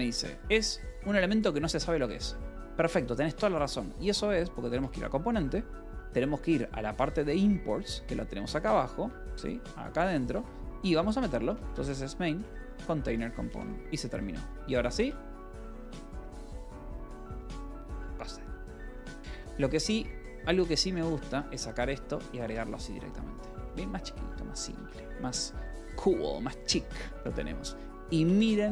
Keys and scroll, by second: 0.1 space, 0.3 d, 1.7 Escape, 2.2 k, 2.7 j, 3.2 :, 4.2 j, 4.7 Return, 7.7 6, 8.0 j, 9.3-12.4 typing, 12.9 Return, 13.2 Escape, 14.0 :, 14.4 k, 14.9 Return, 16.5 j, 17.1 l, 19.2-22.4 typing, 22.9 ctrl+s, 23.7-25.4 typing, 26.6-28.7 typing.